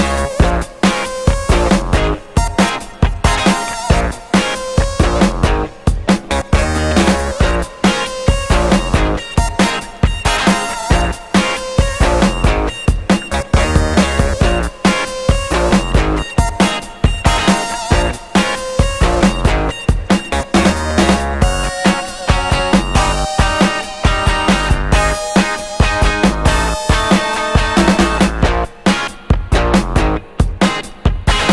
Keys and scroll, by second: 6.2 Return, 30.5 Escape, 30.6 d, 31.3 Escape.